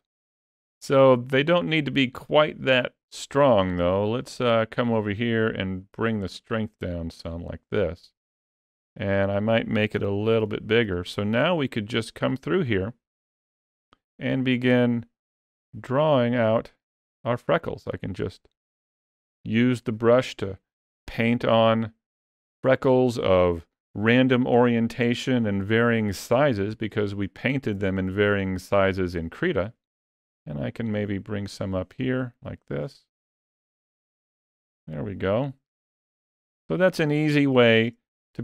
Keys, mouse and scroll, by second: 0.3 ctrl+z, 1.4 ctrl+middle click, 3.8 middle click, 5.6 click, 8.2 ctrl+middle click, 9.7 f, 11.3 middle click, 15.5 click, 16.7 click, 18.0 click, 20.7 click, 26.7 shift+middle click, 29.5 click, 30.7 click, 31.6 click, 32.5 click, 33.4 click, 34.2 click, 35.5 middle click, 36.4 ctrl+middle click, 37.3 shift+middle click.